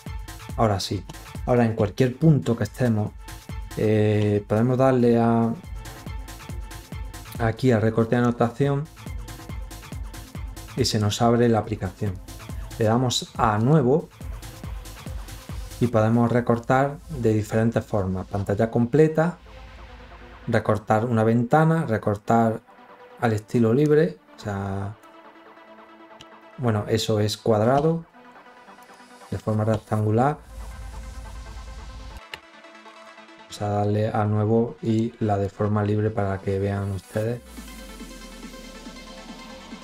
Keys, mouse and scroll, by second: 0.0 click, 7.9 click, 10.1 click, 12.0 click, 13.4 click, 23.6-24.9 drag, 28.6 click, 32.7 click, 34.5 click, 35.1-37.7 drag.